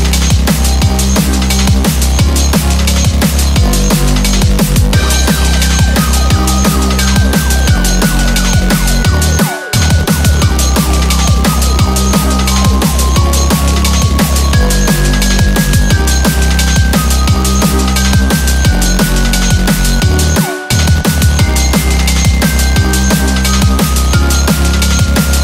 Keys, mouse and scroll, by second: 0.0 click, 0.1 g, 1.7 click, 1.9 g, 4.3 click, 4.4 g, 6.3 click, 6.3 g, 6.5 g, 8.9 click, 9.0 g, 11.6 click, 13.7 g, 14.7 click, 14.8 g, 17.9 click, 18.0 g, 23.8 shift+middle click, 23.8 click, 23.8 scroll up 3, 23.9 g, 24.7 shift+middle click, 24.7 click, 24.7 g, 24.8 g.